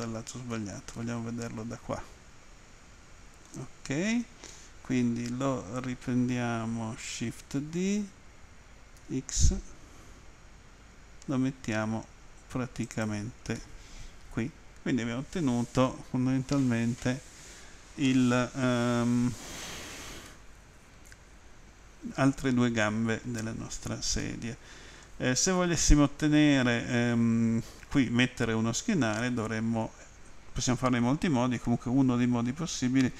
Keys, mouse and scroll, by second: 9.0 x, 12.9 click, 13.6 middle click, 20.3 middle click, 24.2 middle click.